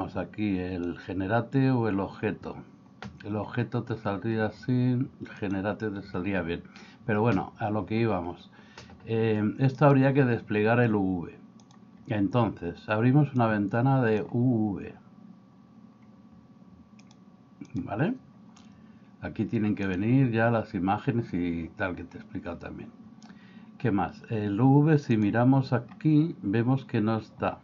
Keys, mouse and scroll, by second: 9.8-11.8 drag, 13.5 click, 17.1 click, 19.9-25.3 drag.